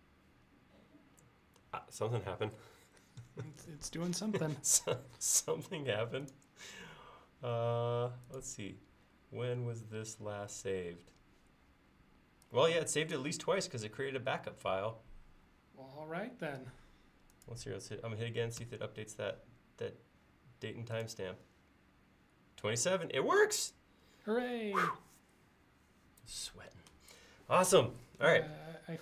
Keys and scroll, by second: 18.7 ctrl+s.